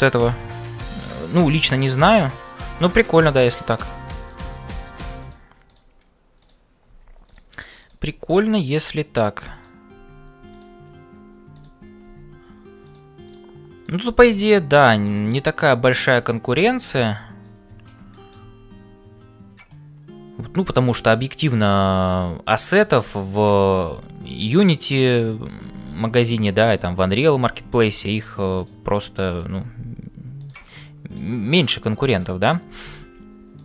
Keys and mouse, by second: 0.0-33.6 typing, 0.8 click, 2.4 click, 4.2 click, 6.4 click, 11.5 click, 16.0 click, 18.1 shift+middle click, 22.7 click, 23.4 click, 24.4 middle click, 29.3 click, 30.8 middle click, 31.4 click, 32.1 middle click.